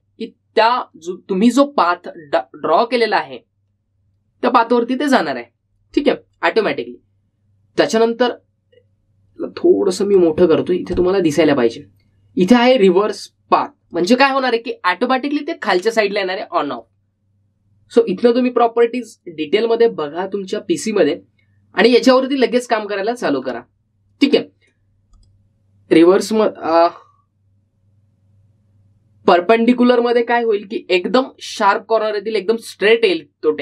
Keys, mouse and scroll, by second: 0.1-0.6 scroll down 1, 0.6 middle click, 11.3-14.4 drag, 14.1-15.5 typing, 15.0 click, 17.8 click, 26.3 click, 32.6 click.